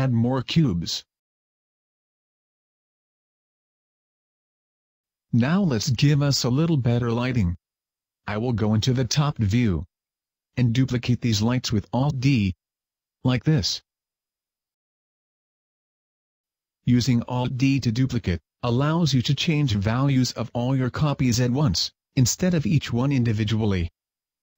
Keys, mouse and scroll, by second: 1.7 click, 3.9 middle click, 4.5 scroll up 1, 5.3-6.4 scroll down 4, 6.8 right click, 7.8 KP_7, 8.4 KP_5, 9.6 g, 11.1 click, 11.4 alt+d, 12.8 alt+d, 13.7 click, 13.8 alt+d, 15.2 click, 16.5 middle click, 17.9 KP_5, 18.8 middle click, 20.3 right click, 22.1 click, 23.2 click, 23.6 click.